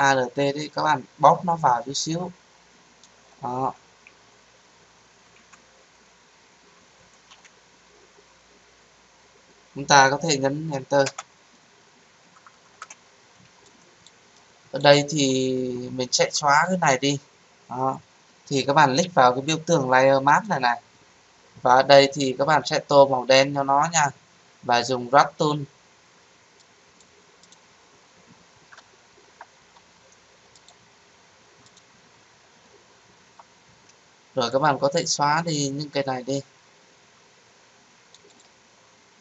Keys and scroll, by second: 11.0 Return.